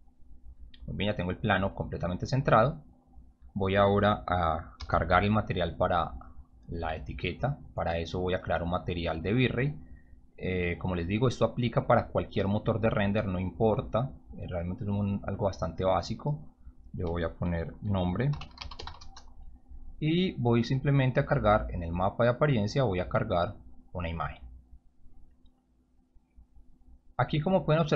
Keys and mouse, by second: 1.5 click, 4.7 m, 7.8 right click, 9.1 click, 9.9 click, 11.6 click, 14.0-14.6 drag, 14.8 click, 14.9 click, 16.5 click, 18.0-19.3 typing, 21.1-21.6 drag, 24.7 click, 27.0 click.